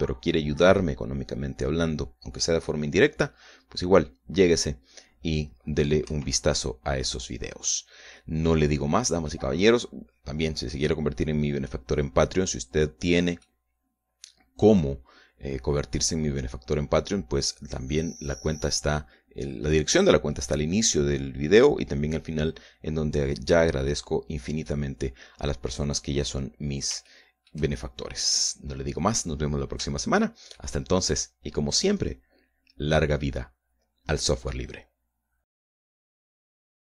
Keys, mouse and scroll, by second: 7.3 Escape, 8.1 scroll down 2, 8.7 scroll down 2, 9.0-10.7 middle drag, 10.9-11.2 scroll up 1, 11.4 scroll up 1, 12.9-14.6 middle drag, 14.7-20.9 middle drag, 21.5 scroll down 2, 27.6 scroll down 2, 28.3 shift+middle click, 29.3 scroll up 2, 30.1 scroll down 2, 30.6 scroll down 2, 31.3 shift+middle click.